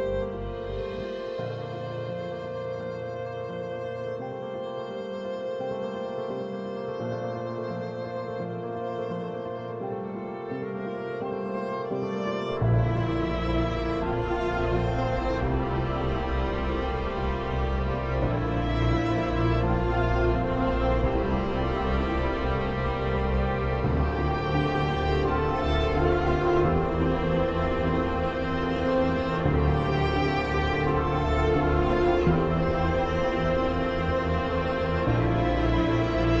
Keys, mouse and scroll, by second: 0.2 o, 1.6-4.5 drag, 4.5 Escape, 5.4-17.1 drag, 18.9 c, 19.6 Escape, 19.7-22.8 drag, 24.6 right click, 27.0-29.5 drag, 29.5 space, 30.4-33.5 drag, 33.5 right click, 36.3 click.